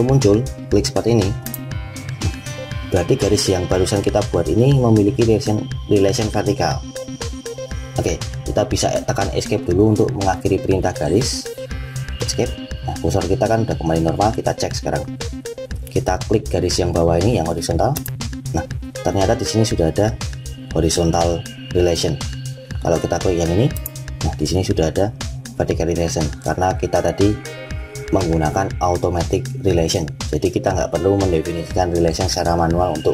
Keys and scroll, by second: 9.2 Escape.